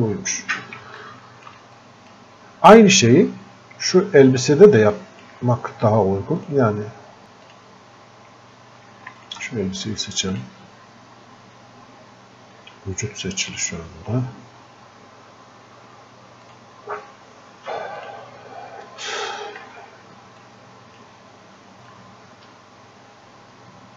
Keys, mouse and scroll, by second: 1.1 alt+click, 1.8-4.6 drag, 4.8 click, 6.4 click, 7.2 f, 7.5 click, 9.2 alt+click, 10.4 click, 13.6 click, 16.4 click, 19.7 f, 20.5 click, 21.9-23.9 drag.